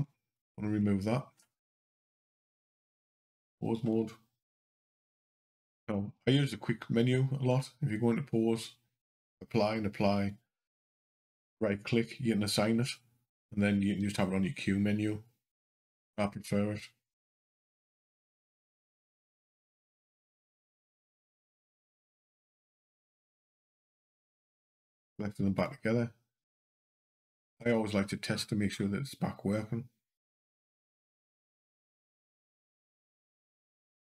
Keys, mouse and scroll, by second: 1.8 Delete, 2.7 click, 4.4 q, 7.3 click, 13.8 q, 15.5 click, 17.7 click, 19.3 shift+click, 20.4 ctrl+p, 25.4 click, 26.5 click, 27.8 scroll up 2, 30.2 click, 31.0 click, 32.3 g, 33.8 click.